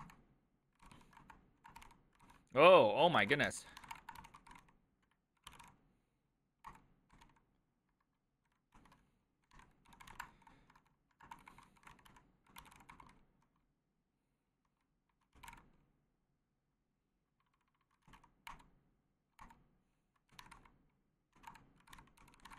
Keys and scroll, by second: 0.0-6.1 typing, 3.1 ctrl+w, 3.4 ctrl+w, 3.5 ctrl+o, 3.6 ctrl+c, 6.7 Return, 7.3-13.4 typing, 14.9-16.0 typing, 17.2-18.6 typing, 19.4 Return, 20.2-22.5 typing, 21.5 Return, 21.9 ctrl+w, 22.0 ctrl+o.